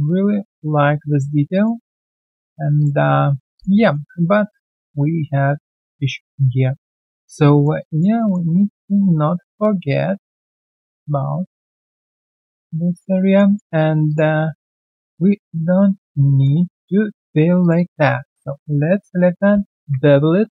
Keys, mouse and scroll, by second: 1.1-1.5 alt+scroll down 1, 1.5 alt+click, 1.8 alt+middle click, 2.2 alt+click, 2.5 alt+right click, 2.7 alt+click, 3.0 alt+right click, 3.8 alt+middle click, 4.0 alt+right click, 4.3 alt+middle click, 6.6 alt+middle click, 7.2 alt+click, 7.5 alt+middle click, 7.7 alt+click, 8.1 alt+middle click, 8.5 alt+right click, 9.1 alt+right click, 10.2 double click, 10.6-11.1 alt+scroll down 1, 11.8 right click, 12.8 alt+right click, 13.2 alt+middle click, 13.4 alt+right click, 14.4 shift+click, 14.6 shift+double click, 15.4 ctrl+right click, 16.7 alt+middle click, 17.6 ctrl+click, 17.7 ctrl+double click, 19.5 ctrl+b.